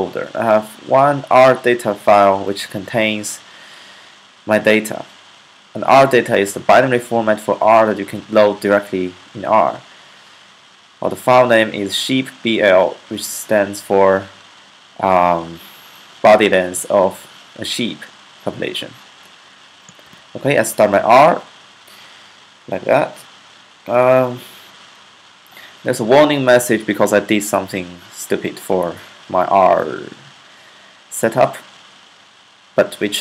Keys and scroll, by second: 19.7-20.4 typing.